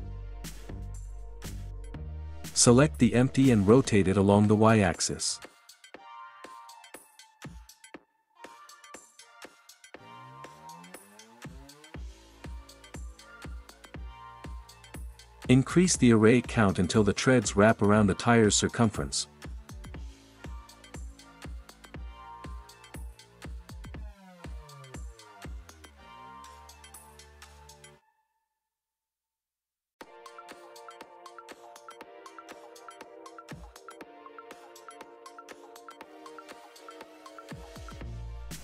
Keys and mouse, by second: 1.0 r, 1.4 y, 7.8 click, 11.2 r, 11.6 y, 13.8 click, 15.8 click, 20.3-21.6 drag, 26.1 r, 26.4 y, 30.8-32.6 drag, 33.6 r, 33.8 y, 36.9 middle drag, 38.1 r, 38.2 y.